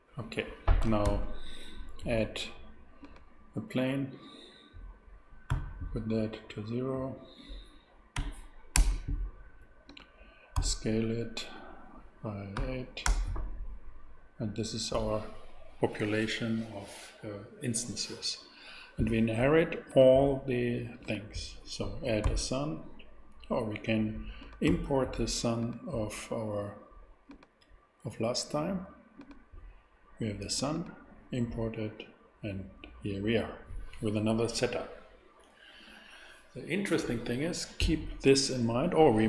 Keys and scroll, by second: 1.0 shift+a, 5.5 n, 8.1 0, 8.7 Return, 10.5 s, 12.5 8, 13.0 Return, 22.2 shift+a.